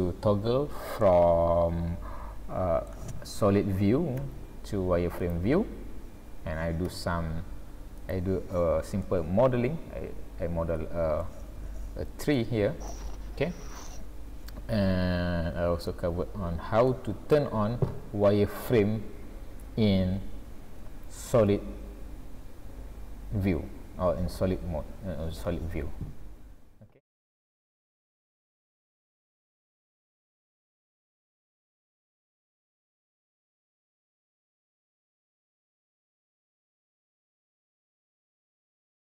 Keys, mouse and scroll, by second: 1.0 middle click, 4.2 z, 6.9 z, 9.0 middle click, 11.5 scroll up 2, 12.4 shift+middle click, 13.1-13.5 scroll down 2, 15.9 middle click, 17.3 scroll up 1.